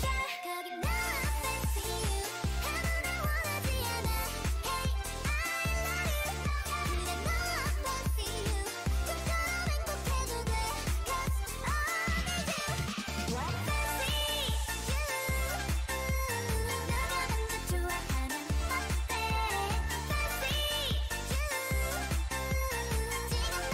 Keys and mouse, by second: 1.2 Tab, 2.6 ctrl+r, 3.0 a, 3.5 g, 6.0 click, 6.2 g, 7.5 Tab, 13.1-16.3 drag, 16.3 middle click, 17.9 Tab, 18.8 click, 19.1 x, 20.3 click, 20.6 x, 21.9 x.